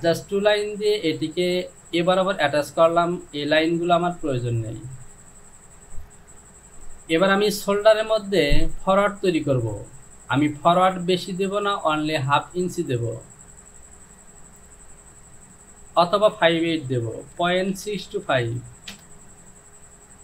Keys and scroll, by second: 3.9 Delete, 16.2 Down, 17.4 KP_Decimal, 17.8 KP_6, 18.1 KP_2, 18.3 KP_5, 19.0 Return.